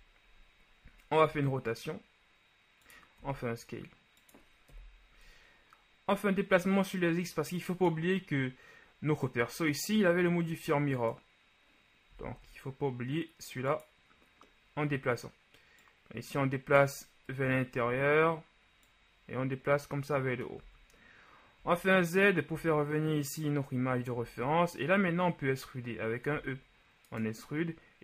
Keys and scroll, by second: 1.4 r, 4.8 KP_1, 12.3 s, 12.4 z, 17.4 KP_1, 20.8 z, 26.4 e.